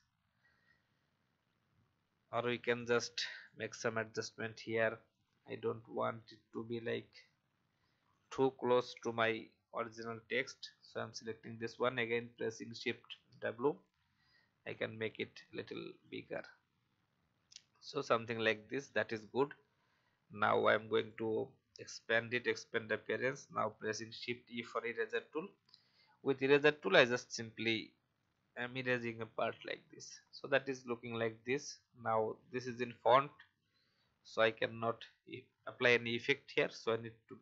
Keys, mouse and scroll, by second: 0.4 alt+scroll down 1, 2.3-6.8 drag, 7.5 v, 8.1 click, 12.7 shift+w, 14.7-16.8 drag, 17.0 alt+scroll down 1, 18.4 alt+scroll down 1, 20.9 click, 22.7 alt+scroll up 1, 23.8 shift+e, 29.0 v, 30.2 alt+scroll down 1, 31.4 click, 36.6 right click.